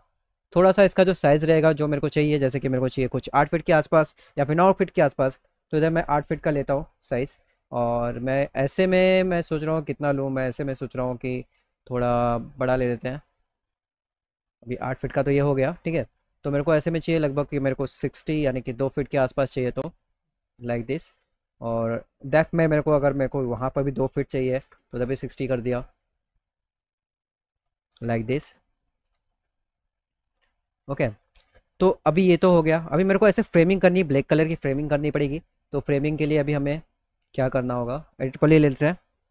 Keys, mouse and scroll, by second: 0.0 click, 0.3-0.9 scroll up 1, 1.3 click, 7.4 middle click, 10.7 click, 12.0 middle click, 12.3 middle click, 12.5 alt+middle click, 13.0 middle click, 13.4 middle click, 13.8 middle click, 14.1 middle click, 14.3 middle click, 14.6 middle click, 16.5 click, 21.5 click, 25.1 z, 25.4 middle click, 25.9 right click, 26.4 middle click, 26.7 alt+middle click, 27.8 alt+w, 28.4 middle click, 30.6 middle click, 30.9-32.0 alt+middle drag, 34.8 click, 37.5 click, 38.3 w.